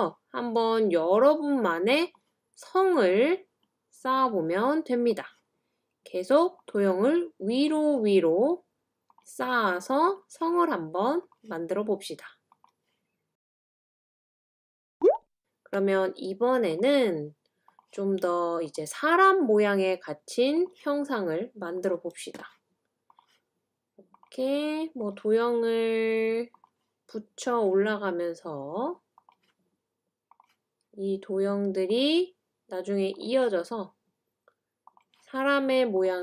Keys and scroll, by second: 3.6-4.0 Escape, 14.9 BackSpace.